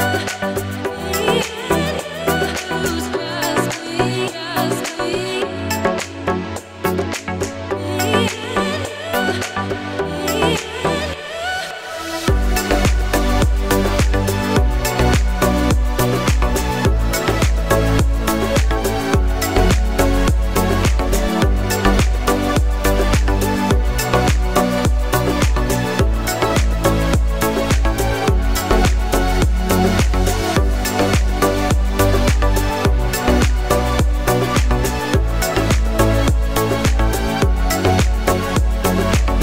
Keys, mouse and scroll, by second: 0.4 click, 1.5 alt+scroll down 2, 1.9 alt+scroll up 2, 2.4 alt+scroll down 1, 2.9-3.9 scroll down 3, 3.9 click, 7.7-9.7 alt+scroll up 4, 9.7 click, 11.1 click, 11.7-12.6 alt+scroll down 2, 12.6 click, 17.9-18.4 scroll up 5, 19.4 click, 23.3 click, 29.4 click, 32.9-33.3 alt+scroll up 2, 33.6 click, 34.8-37.3 alt+scroll down 4, 37.4-37.8 alt+scroll down 2, 38.7 click.